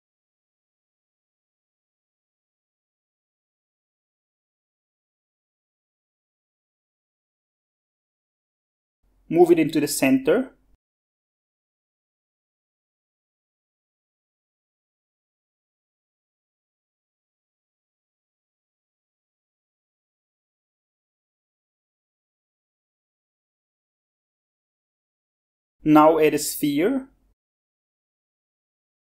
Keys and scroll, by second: 0.0-1.0 typing, 1.2 Tab, 1.7 Tab, 2.4 Tab, 2.7-7.2 typing, 13.0-16.3 typing, 17.0 shift+Tab, 17.9-21.2 typing.